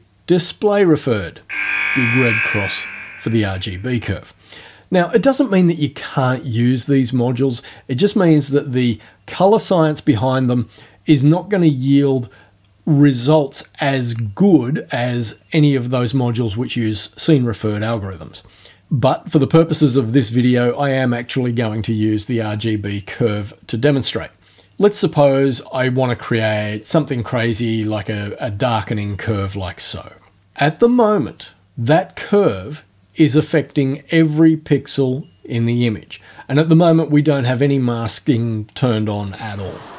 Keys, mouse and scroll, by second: 26.8-29.1 drag.